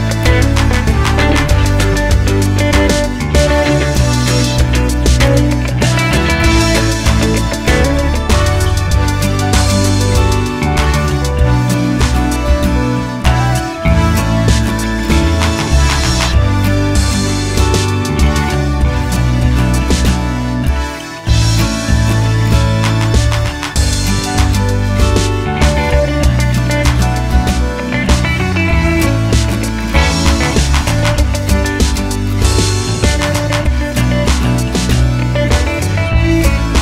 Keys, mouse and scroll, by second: 0.6 click, 1.0 g, 1.8-3.7 middle drag, 3.7 click, 4.1 g, 4.9-6.3 middle drag, 5.1-5.4 scroll down 2, 6.3-7.5 drag, 7.5-13.5 middle drag, 8.2 scroll down 1, 10.1 ctrl+j, 13.5 scroll up 1, 13.5-18.1 drag, 17.7 ctrl+j, 18.1-22.2 middle drag, 25.0 middle click, 25.4 g, 26.3 middle click, 28.1-29.5 middle drag, 28.1-28.6 scroll down 2, 28.6-29.5 scroll up 2, 29.5-33.0 right drag, 33.0 click, 35.9-36.8 drag.